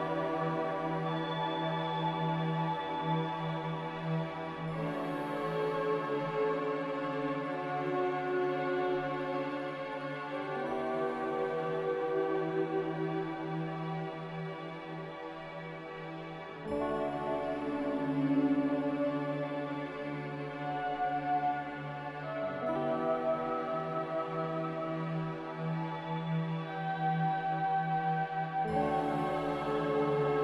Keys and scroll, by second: 5.0-5.7 typing, 14.5-15.6 typing.